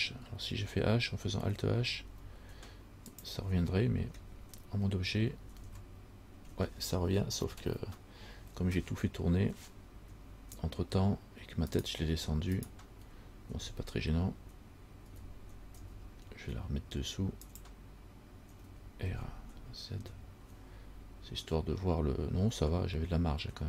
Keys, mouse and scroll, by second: 2.0 alt+h, 3.3 click, 4.3 Tab, 5.8 alt+h, 6.9-7.5 scroll down 3, 7.7 scroll down 4, 11.9 right click, 12.8 shift+right click, 15.3 g, 18.9 r.